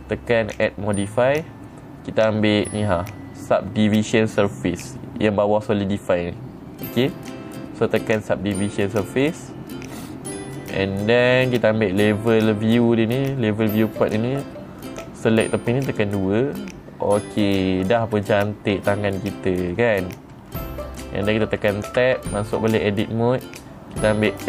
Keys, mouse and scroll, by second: 1.0 click, 9.6 click, 16.3 click, 18.2 scroll up 3, 18.7-20.3 middle drag, 22.5 Tab.